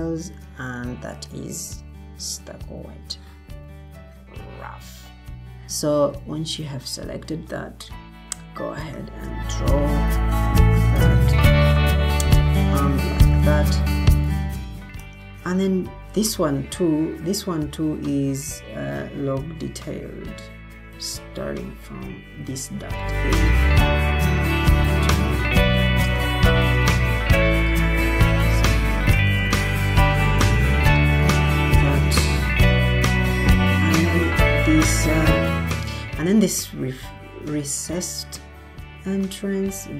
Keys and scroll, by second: 2.4 s, 3.9 s, 5.2 s, 30.4 Escape.